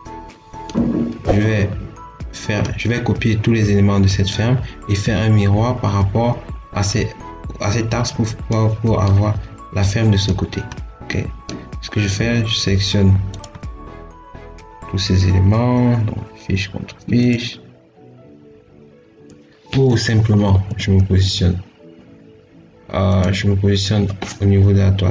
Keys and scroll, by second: 20.3 Escape.